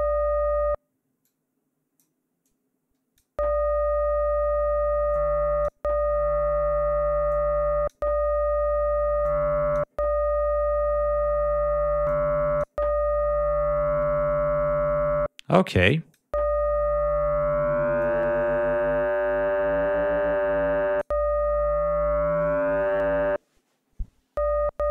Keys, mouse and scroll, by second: 1.2 click, 2.4 click, 5.1 click, 7.3 click, 9.2 click, 12.0 click, 15.8 click, 18.0-21.2 drag.